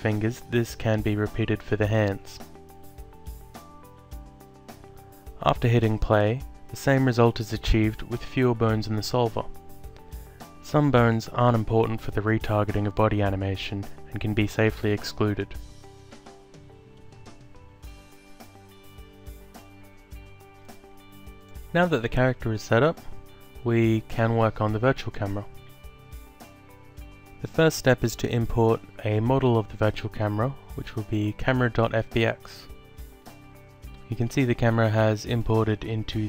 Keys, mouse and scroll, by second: 0.6 alt+click, 2.4 click, 3.6 click, 5.0 click, 6.6 alt+click, 12.4 click, 13.3 alt+click, 14.9 click, 17.0 click, 18.7 alt+click, 20.1 click, 23.7 click, 25.0 alt+click, 27.2 click, 29.8 click, 31.5 alt+click, 32.7 click.